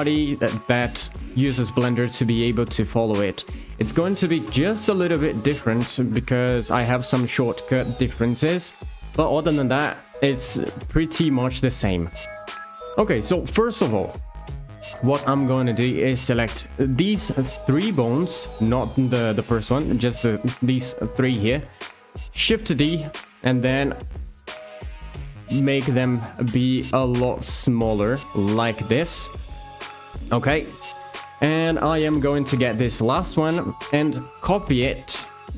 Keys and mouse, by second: 1.8 click, 3.8 shift+middle click, 11.6 shift+middle click, 14.7 shift+middle click, 16.9 shift+click, 22.4 shift+d, 23.0 click, 23.7 s, 28.6 click, 35.0 shift+d.